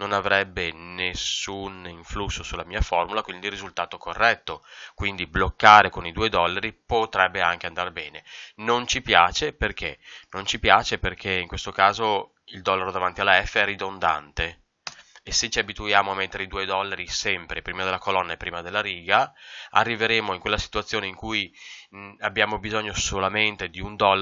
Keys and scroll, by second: 8.0 Escape.